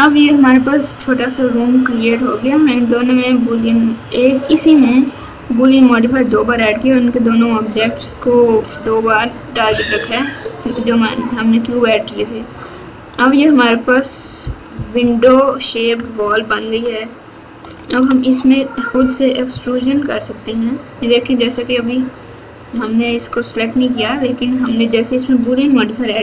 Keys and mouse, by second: 2.0 click, 3.4 click, 4.5 click, 4.9 click, 14.7 KP_4, 14.9 KP_4, 15.2 KP_4, 15.9 KP_Add, 16.2 KP_Add, 16.5 KP_Add, 16.7 KP_Add, 17.6 KP_Subtract, 17.8 KP_Subtract, 17.9 KP_Subtract, 19.5 Tab.